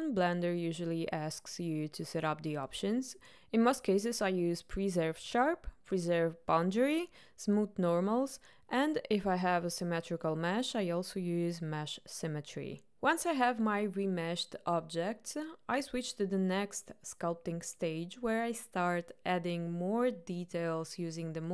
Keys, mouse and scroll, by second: 12.7-13.7 ctrl+middle drag, 13.7-14.3 drag, 14.3-21.5 middle drag.